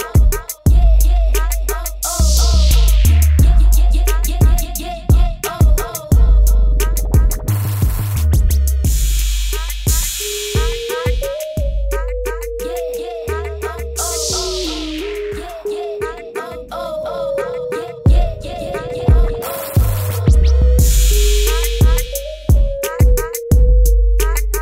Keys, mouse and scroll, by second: 3.5 Return, 3.7 Up, 4.7 click, 6.1 ctrl+alt+click, 9.4 t, 10.7 alt+click, 12.7 alt+click, 13.3 click, 14.3 KP_Enter, 14.6 v, 14.7 Left, 15.3 Down, 16.1 click, 18.1 b, 20.5 click, 22.1 KP_0, 23.3 click, 24.3 v.